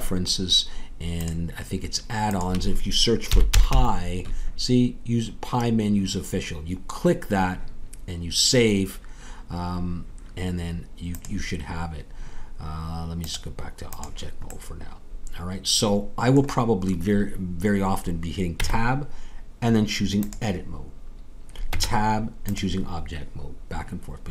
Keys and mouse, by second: 14.0-17.1 drag, 17.1-18.5 middle drag, 18.5 Tab, 20.3 Tab.